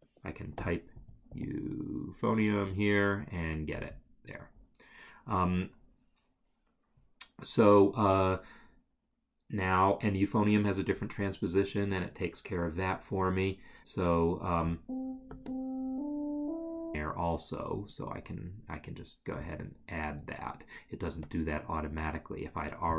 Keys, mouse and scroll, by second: 4.0 double click, 14.8 click, 19.5 click.